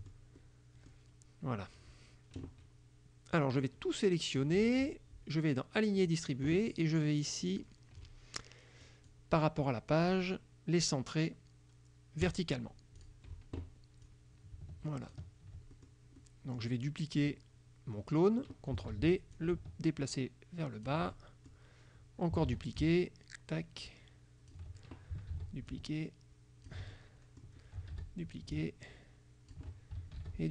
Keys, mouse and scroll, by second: 0.1 ctrl+right click, 0.5 ctrl+middle click, 0.7 click, 3.6 click, 6.1 click, 8.9 click, 10.1 click, 12.3 click, 13.1 click, 14.1-15.4 drag, 15.8 ctrl+click, 16.3 ctrl+click, 19.0 ctrl+d, 19.4-21.1 ctrl+drag, 21.2 ctrl+click, 22.6 ctrl+d, 22.9-24.8 ctrl+drag, 25.4 ctrl+d, 25.8-27.0 ctrl+drag, 27.1 ctrl+middle click, 28.0 ctrl+d, 28.6 ctrl+click, 30.3 ctrl+d.